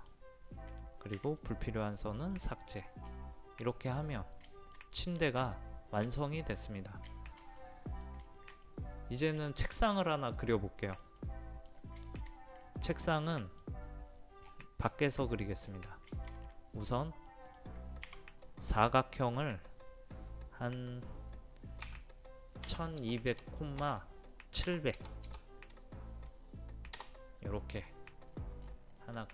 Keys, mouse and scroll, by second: 0.1-1.2 scroll down 1, 2.4 middle click, 3.2-3.5 scroll up 1, 3.5 scroll down 1, 3.7-7.6 middle drag, 8.3 shift+middle click, 9.4-14.3 shift+middle drag, 14.4 scroll down 1, 14.5 scroll up 1, 14.9 middle click, 15.3 scroll down 1, 16.1-18.3 middle drag, 19.2-20.3 drag, 21.9 KP_1, 22.7 KP_2, 23.0 KP_0, 24.7 KP_7, 25.0 KP_0, 29.0 middle click.